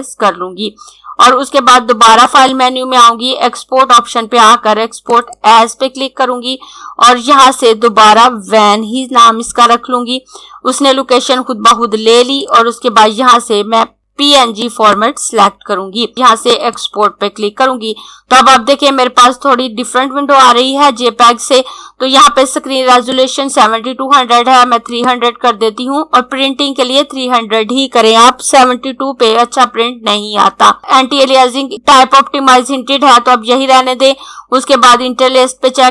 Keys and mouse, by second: 4.9 click, 8.4-9.5 typing, 12.0 click, 14.6 click, 16.6 click, 23.0 click.